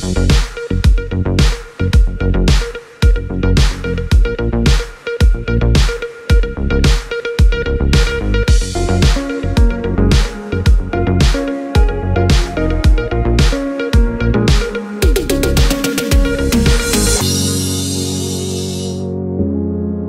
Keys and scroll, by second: 2.0 l, 6.1 l, 10.8 l.